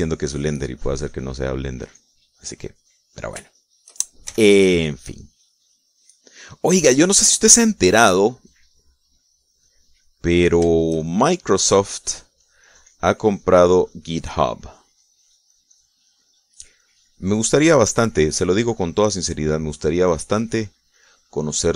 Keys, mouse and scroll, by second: 0.4-2.7 drag, 2.3 middle click, 2.8 click, 3.7 middle click, 4.3 shift+middle click, 5.1 shift+f, 5.8-8.4 drag, 8.7 click, 9.5 click, 10.0-11.5 drag, 11.8-15.2 shift+drag, 15.5-16.9 drag, 17.3 middle click, 17.7 click, 18.8-19.8 drag, 19.8 middle click, 20.5 click, 21.3 middle click.